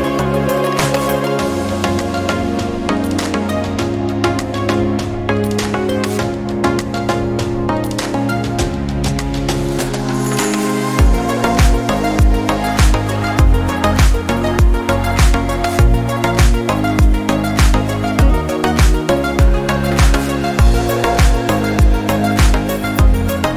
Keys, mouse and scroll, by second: 0.0 click, 0.1 click, 0.5 click, 0.9 drag, 1.2 click, 1.6 click, 2.2 click, 2.5 click, 2.7 click, 3.4 click, 3.6 click, 4.1 click, 4.3 click, 4.4 click, 4.6 click, 4.8 ctrl+d, 5.0 shift+click, 5.2 click, 5.4 click, 5.6 click, 5.7 drag, 6.0 click, 6.4 click, 7.5 click, 7.7 -, 7.8 drag, 8.2 click, 8.4 click, 8.7 click, 9.4 click, 9.5 click, 9.8 click, 10.4 click, 10.8 click, 11.2 drag, 11.3 click, 11.8 click, 12.0 drag, 12.2 drag, 12.6 click, 12.9 click, 13.2 click, 13.4 click, 13.5 click, 13.8 drag, 14.3 click, 14.6 click, 14.9 click, 15.3 click, 15.5 middle drag, 15.6 drag, 15.9 click, 16.1 -, 16.2 middle click, 16.9 click, 17.2 shift+click, 17.4 click, 17.5 click, 18.0 click, 18.6 click, 18.8 click, 19.0 click, 19.1 click, 19.4 click, 19.5 click, 19.6 click, 20.1 click, 20.3 click, 20.5 click, 21.0 drag, 21.3 click, 21.9 click, 22.2 click, 22.5 click, 22.8 -, 22.9 click, 23.1 click, 23.4 click.